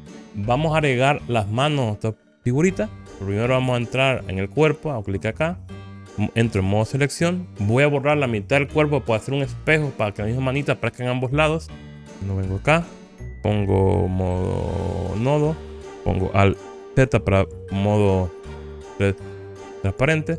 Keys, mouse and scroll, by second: 5.1 click, 6.7 Tab, 13.0-17.3 drag, 15.2 1, 17.0 alt+z, 17.7-20.3 drag.